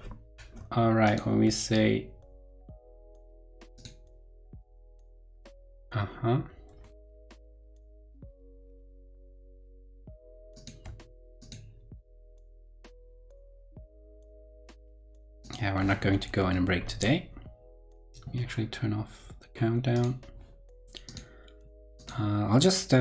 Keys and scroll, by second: 7.4 ctrl+super+Left, 16.8 ctrl+Left.